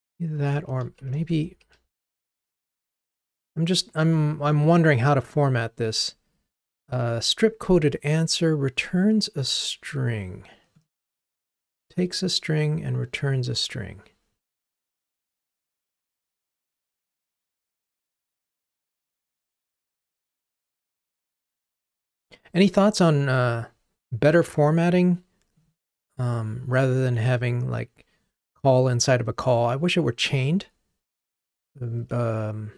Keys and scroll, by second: 1.7 alt+super+l.